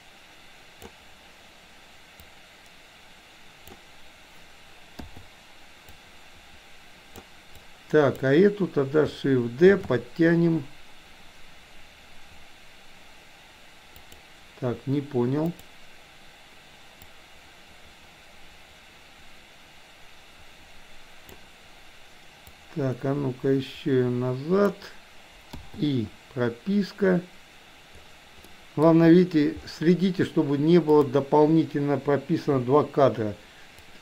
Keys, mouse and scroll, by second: 2.3-3.8 drag, 6.0-7.3 drag, 7.6 click, 9.8 shift+d, 15.5 click, 17.1-21.5 drag, 22.8-24.8 drag, 28.5 middle click, 30.8 click, 32.6 Delete, 33.9-34.0 drag.